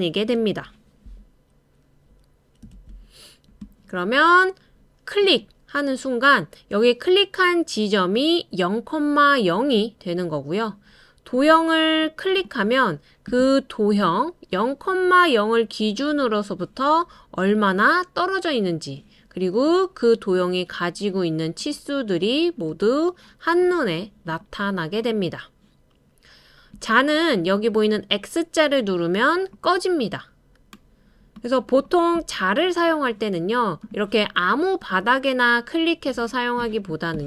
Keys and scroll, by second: 2.7 super+space.